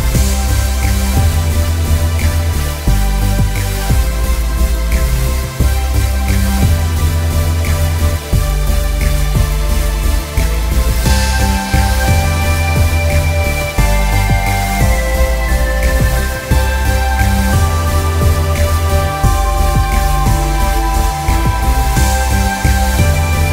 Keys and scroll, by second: 0.8 ctrl+s, 1.6 Escape.